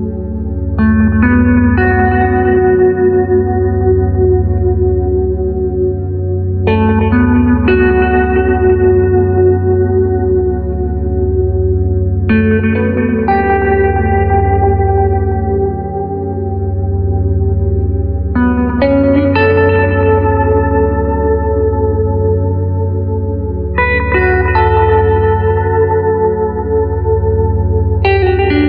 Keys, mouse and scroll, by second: 0.0 click, 2.1 click, 3.7-5.8 middle drag, 7.9 click, 11.7 u, 18.5 click, 20.9-23.1 middle drag, 23.8-26.7 drag.